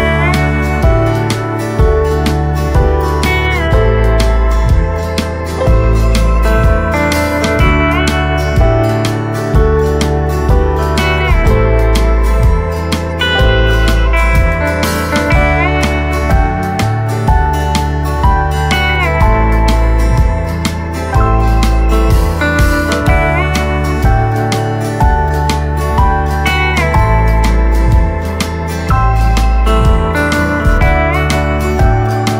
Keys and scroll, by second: 0.4 ctrl+z, 13.9 ctrl+z, 16.4 ctrl+z, 18.6 ctrl+z, 20.4 ctrl+z, 23.1 space, 23.5 space.